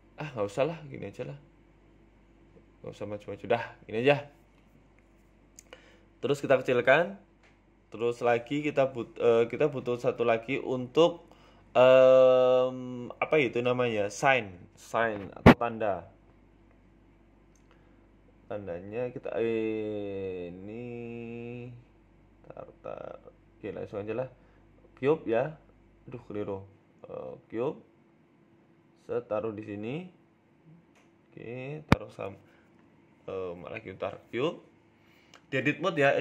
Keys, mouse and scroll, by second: 0.7 ctrl+b, 1.5 ctrl+z, 3.2 g, 4.2 Tab, 4.4-5.5 scroll down 6, 4.6 middle click, 5.0 middle click, 5.6-5.9 scroll up 3, 5.8 middle click, 6.6 KP_3, 6.9 KP_1, 7.5 s, 8.6 scroll down 6, 9.4 scroll up 6, 9.8-10.1 scroll down 1, 10.1 scroll down 1, 10.1 s, 10.9-11.5 scroll down 1, 11.5 middle click, 11.9 Tab, 12.2 middle click, 12.5 Tab, 13.3 middle click, 17.0 middle click, 17.5 KP_1, 18.4-19.0 scroll up 3, 19.0-19.4 scroll up 1, 19.4 middle click, 21.2 middle click, 22.6 right click, 24.0 shift+middle click, 24.8 KP_1, 25.3 scroll down 3, 25.5 shift+middle click, 25.7 shift+a, 26.7 scroll down 2, 27.1 ctrl+z, 27.4 scroll up 4, 27.7 shift+s, 28.4 shift+a, 30.1 s, 31.4 g, 33.3 Delete, 34.0 right click, 34.2 Tab, 34.6 shift+a, 35.5 s.